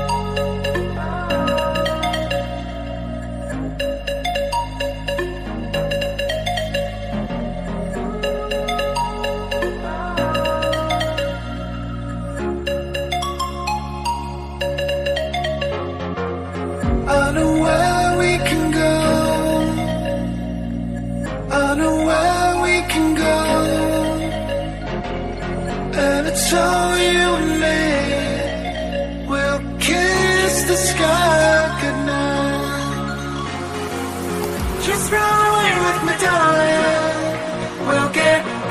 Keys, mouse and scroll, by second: 0.5 Tab, 1.6 KP_7, 2.2 a, 3.4 click, 4.2 click, 4.8 a, 5.3 click, 5.6 click, 6.1 a, 6.4 a, 6.7 click, 7.6 click, 7.8-9.0 drag, 9.1 a, 9.3 a, 10.0 click, 10.9 click, 11.6-12.1 drag, 12.5 click, 13.3 click, 14.3 click, 15.1 click, 17.8 click, 18.2 click, 18.6 Tab, 19.7 click, 20.7-22.5 drag, 22.5 Tab, 22.8 click, 23.5 typing, 25.3 click, 26.7 click, 27.5 click, 27.8 click, 29.5 KP_Divide, 29.9-30.4 scroll down 1, 30.4 KP_9, 31.5 click, 31.8-32.7 scroll up 1, 32.7 click, 33.1 scroll down 1, 33.8 KP_9, 34.5 Tab, 34.7-35.4 scroll up 4, 35.4 scroll down 1, 36.3-36.6 scroll down 1, 38.0-38.7 drag.